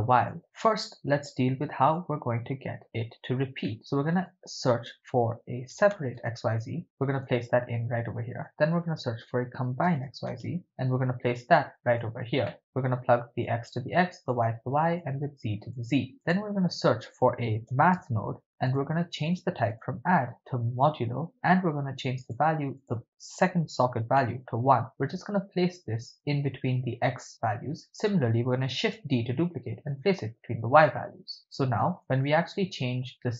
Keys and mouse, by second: 0.3 drag, 0.5-2.1 drag, 3.7 middle click, 3.9 shift+a, 8.0 shift+a, 12.5 middle click, 13.9 click, 15.3 click, 16.2 shift+a, 19.7-21.3 drag, 22.3 click, 22.8-24.3 drag, 25.2-26.1 drag, 26.7-27.8 drag, 28.8 shift+d, 30.2 click, 32.8-33.3 drag.